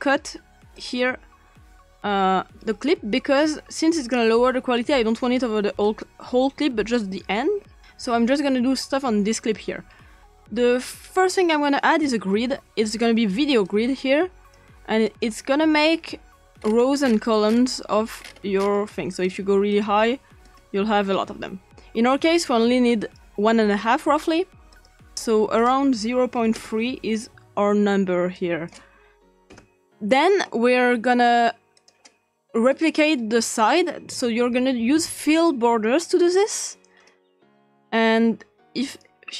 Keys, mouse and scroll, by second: 0.7 click, 2.5 s, 4.8-5.4 drag, 5.8 click, 7.0 click, 7.8-9.3 ctrl+drag, 10.3 BackSpace, 11.5-12.1 typing, 13.6-16.6 drag, 16.6-18.2 scroll up 3, 18.2-19.2 scroll up 1, 19.2-20.8 drag, 19.9-20.4 scroll up 1, 19.9 typing, 23.0 click, 24.7 click, 25.2 click, 26.2 3, 26.5 Return, 28.4 click, 29.2 3, 29.5 Return, 31.8 click, 32.7 click, 32.9 click, 34.3-34.9 typing, 36.2 click, 37.6 click, 38.9 click.